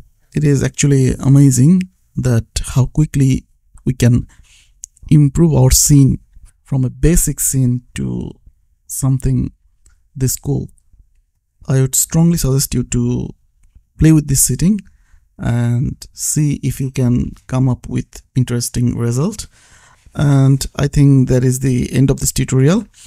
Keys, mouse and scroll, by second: 0.0 Left, 0.2 KP_0, 0.6 ctrl+s, 2.0 click, 4.3 click, 5.6 KP_2, 6.0 ctrl+s, 8.0 click, 10.5 click, 12.8 click, 14.0 KP_1, 14.3 ctrl+s, 15.2 click, 17.4 click, 18.1 shift+Right, 18.7 Right, 19.1 ctrl+s, 20.0 shift+s, 20.2 shift+Left, 20.8 Left, 21.0 ctrl+s.